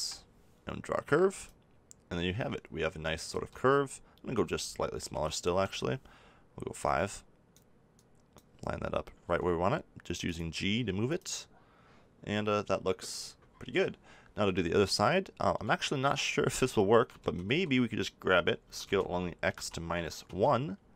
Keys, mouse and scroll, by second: 2.3 click, 3.3 ctrl+z, 4.3-6.2 drag, 9.2 g, 10.3 click, 16.4-18.6 middle drag, 17.1 a, 17.4 a, 18.6 s.